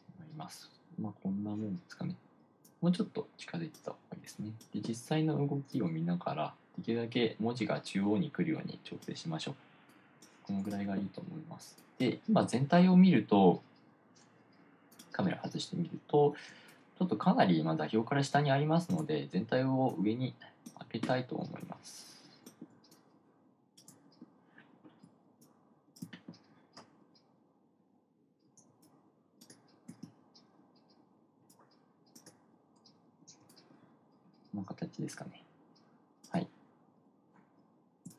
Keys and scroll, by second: 25.5 1, 25.9 1, 26.1 1, 26.3 1, 30.3 1.